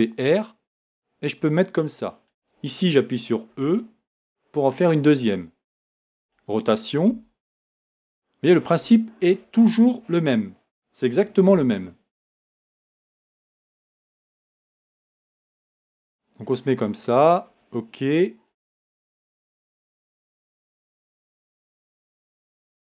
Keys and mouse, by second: 3.6 e, 6.2 right click, 7.1 r, 9.3-10.6 right drag, 11.5 g, 15.5 g, 18.5 click.